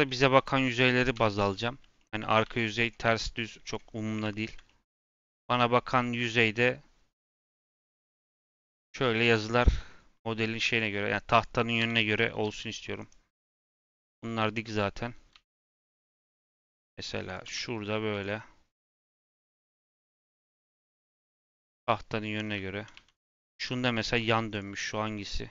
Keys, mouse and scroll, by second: 0.3 click, 1.1 l, 1.5 middle click, 2.4 g, 2.9 r, 4.0 scroll down 2, 4.3 middle click, 5.2 r, 7.5 g, 9.6 Tab, 9.9 Tab, 10.6 click, 11.3 click, 11.7 l, 12.4 g, 14.6 click, 15.3 l, 15.7 r, 17.5 g, 18.7 r, 19.4 g, 21.9 Tab, 22.2 Tab, 22.6 middle click, 22.9 Tab, 23.1 click, 23.5 Tab, 23.9 a, 24.5 click.